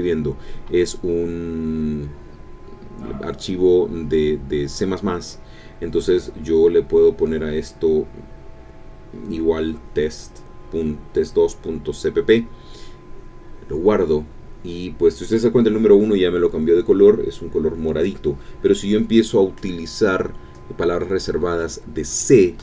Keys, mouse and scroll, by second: 3.0 ctrl+s, 7.0 click, 7.7 click, 9.6-12.5 typing, 13.2 Return, 15.2 Up, 16.3 Return, 16.6 Down, 17.0 Up, 18.1 Down, 18.9 End, 19.2 Up.